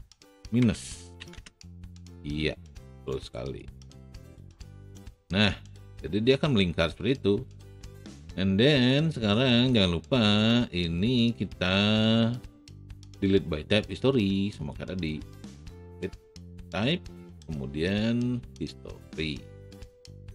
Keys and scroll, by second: 1.1 KP_9, 1.6 e.